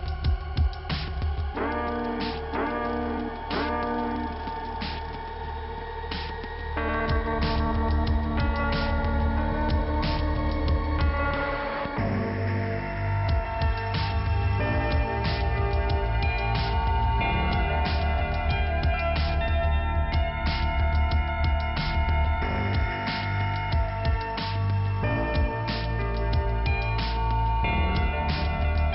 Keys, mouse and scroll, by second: 1.5 click, 1.7 click, 4.2 click, 4.3 click, 4.8 click, 5.7 click, 5.8 click, 6.9 click, 6.9 click, 7.5 click, 7.6 click, 8.8 click, 21.2 click, 21.4 click, 22.2 click, 22.3 click, 25.0 click, 25.1 click, 25.2 click, 25.4 double click, 27.5 middle click, 27.6 middle click, 28.4 click, 28.5 click.